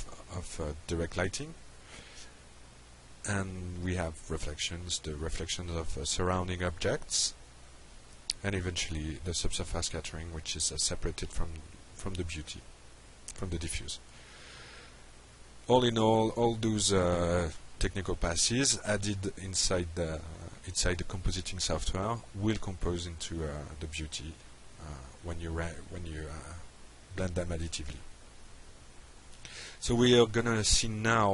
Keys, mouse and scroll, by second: 2.8-4.0 drag, 8.0 click, 12.7 click, 14.1-15.1 drag, 15.7 click, 17.3 drag, 18.5 click.